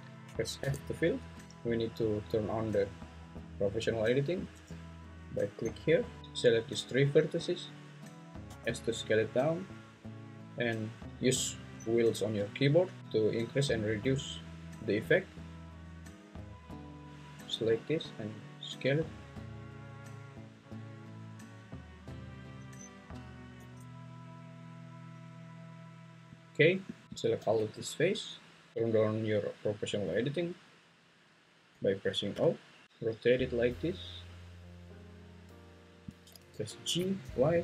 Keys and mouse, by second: 0.6 f, 5.7 click, 6.2 ctrl+z, 6.4 click, 6.7 click, 8.4 s, 23.6 s, 26.3 click, 27.5 `, 32.3 o, 32.8 `, 32.8 r, 36.1 click, 36.5 g, 37.5 y.